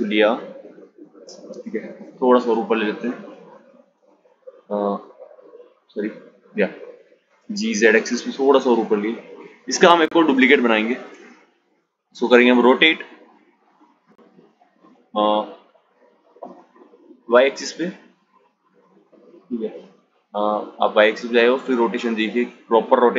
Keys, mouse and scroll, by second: 1.3 z, 6.1 g, 9.9 shift+d, 20.2 click.